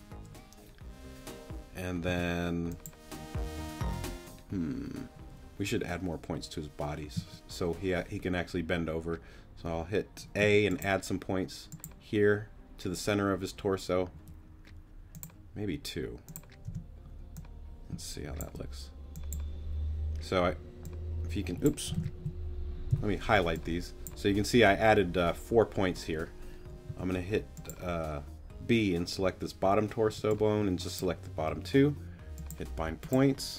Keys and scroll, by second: 2.1 b, 7.1 a, 10.4 a, 16.7 t, 22.9 super+g, 26.9 b, 30.0 g.